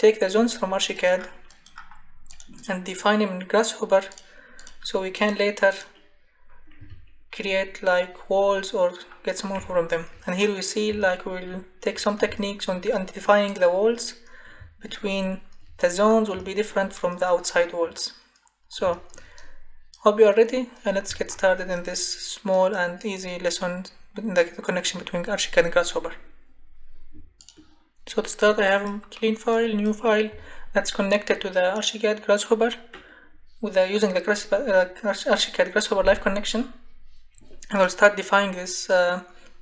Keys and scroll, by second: 6.8 Escape.